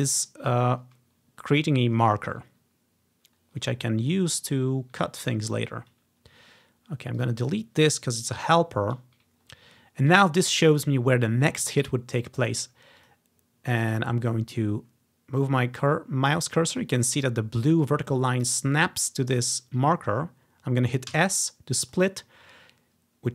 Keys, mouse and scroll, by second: 4.2-6.9 scroll down 1, 7.3-9.4 drag, 8.5 Delete, 9.6-9.9 ctrl+scroll up 1, 12.1-13.1 ctrl+scroll up 1, 13.1-14.4 drag, 21.2 s, 22.0 click, 22.2-23.3 ctrl+drag, 22.5-23.3 ctrl+scroll down 1.